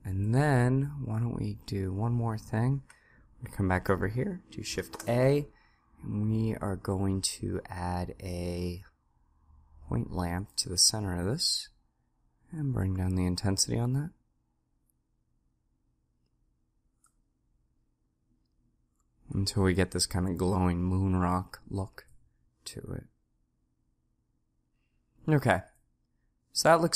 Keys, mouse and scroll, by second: 4.7 shift+a, 26.7-26.9 drag.